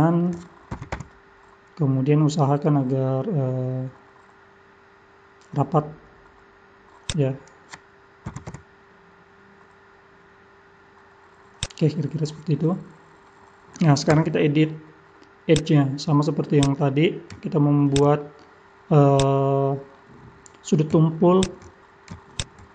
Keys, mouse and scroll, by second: 0.7 g, 8.3 g, 11.8-12.6 scroll down 1, 12.6 middle click, 12.6 scroll down 4, 14.1 Tab, 15.5 click, 16.6 click, 17.9 shift+click, 18.2 middle click, 19.1 click, 19.9 middle click, 21.4 shift+click, 22.3 shift+click.